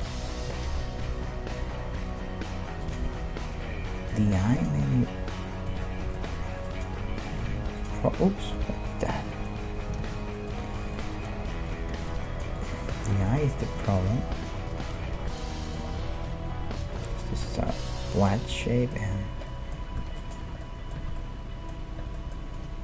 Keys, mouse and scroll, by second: 0.5 g, 3.0 middle click, 7.5 alt+s, 8.2 right click, 9.2 ctrl+z, 10.2 ctrl+z, 11.7-14.3 drag, 11.9 x, 13.8 s, 14.5-17.0 middle drag, 15.8 g, 17.2-19.1 middle drag, 19.5 middle click, 20.0 Tab, 20.4 a, 21.0 a, 22.6-22.8 right drag.